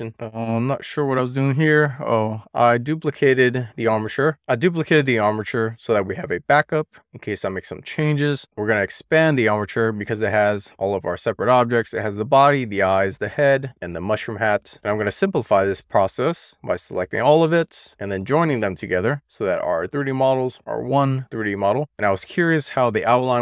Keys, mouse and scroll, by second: 0.0 click, 0.7 click, 2.7 click, 3.9 click, 4.5 shift+d, 5.0 right click, 7.1 click, 7.8-8.3 scroll down 1, 8.3-8.6 scroll up 2, 15.0 click, 15.7 shift+click, 17.8-20.8 right drag, 23.3-23.4 scroll down 1.